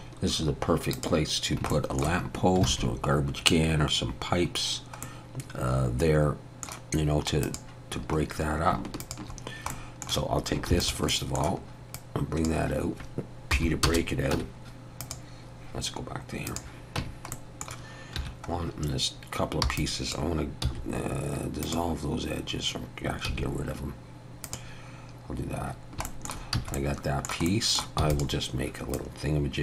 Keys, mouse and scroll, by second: 0.9 click, 1.7 shift+middle click, 2.3 scroll up 1, 2.7 alt+a, 4.6 scroll down 1, 5.0 middle click, 7.4 click, 8.0-8.4 scroll up 2, 9.0 shift+click, 9.4 scroll down 1, 9.7 middle click, 10.7 shift+d, 11.1 middle click, 11.9 click, 13.5 p, 14.4 Tab, 15.0 click, 16.5 click, 17.0 Tab, 17.3 middle click, 18.2 1, 18.6 scroll up 1, 19.6 b, 20.6 x, 23.3 x, 25.8 scroll down 1, 26.1 shift+middle click, 26.6 a, 26.8 middle click, 28.0 shift+middle click, 28.0 e, 28.9 click.